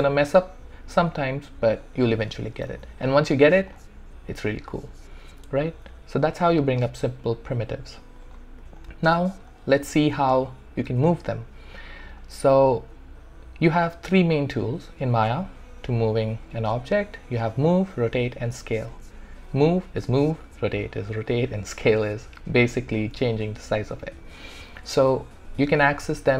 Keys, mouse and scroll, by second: 3.6 shift+right click, 8.2 click.